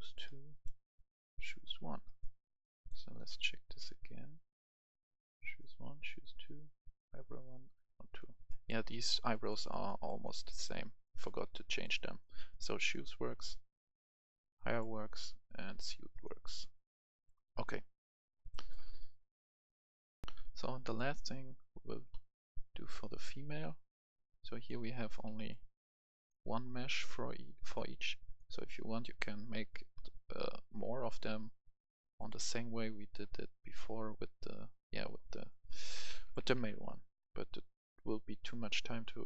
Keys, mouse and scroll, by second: 1.8 scroll down 1, 2.0 right click, 2.8-8.6 drag, 9.3 click, 12.6 click, 18.8-19.1 scroll down 1, 19.1 right click, 20.2 click, 20.6 F10, 20.9 click, 22.1-22.5 scroll down 1, 22.5 click, 23.6-23.9 scroll down 1, 24.5 click, 26.6-27.3 scroll down 1, 27.6 click, 29.5-29.9 scroll down 1, 30.5 click, 31.6 right click, 32.5 scroll down 1, 32.8 right click, 33.3-33.9 scroll down 1, 33.9 right click, 34.3-34.6 scroll up 1, 35.1 click, 35.6 right click, 36.0 ctrl+c, 36.2 click, 36.4 ctrl+v, 37.6-38.9 drag.